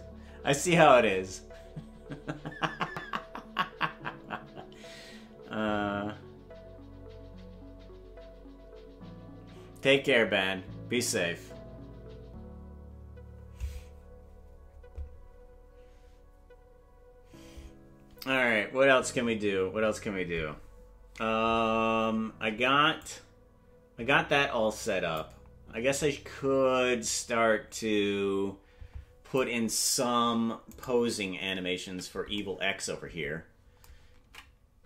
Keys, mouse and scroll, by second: 23.1-25.3 drag, 27.1-29.5 drag, 30.8 right click, 31.8 KP_Decimal, 34.3 ctrl+Tab.